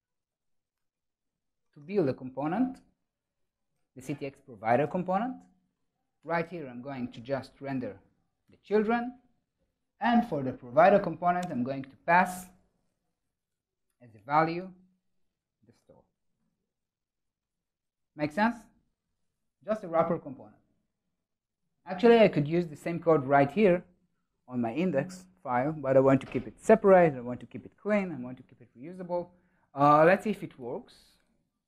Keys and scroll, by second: 1.5 Tab, 3.7 ctrl+alt+shift+Right, 5.6 Tab, 8.5 Return, 17.4 super+s, 28.7 super+s, 31.1 super++.